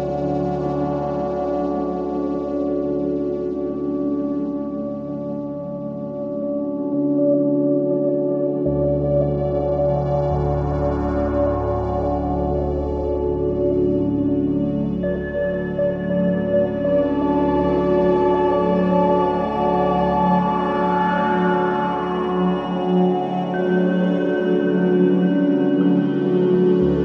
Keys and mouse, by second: 1.0-2.8 typing, 4.1-5.7 alt+drag, 7.3 alt+click, 8.8-14.6 alt+drag, 8.8 typing, 13.3-17.3 typing, 17.6 Return, 18.7 typing, 19.6-21.2 drag, 21.5-23.4 typing, 24.6 click.